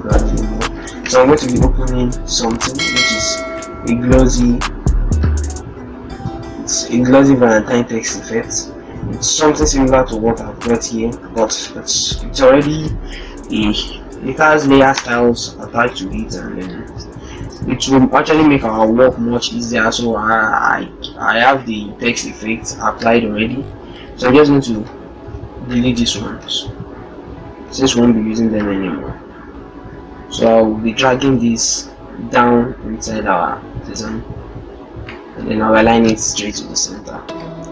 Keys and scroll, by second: 0.8 ctrl+o, 35.0 ctrl+a, 36.5 ctrl+d, 37.1 ctrl+shift+d.